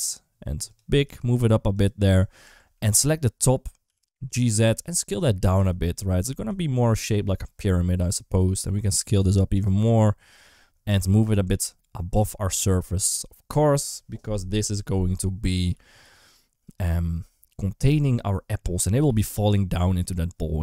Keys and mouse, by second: 0.9 g, 2.3 Tab, 2.6 3, 2.8 click, 3.7 g, 4.7 s, 5.4 g, 6.4 alt+z, 7.0 3, 7.2 click, 7.8 s, 8.9 g, 9.7 s, 10.7 Tab, 11.4 alt+z, 12.0 g, 15.5 s, 18.8 g, 19.6 s.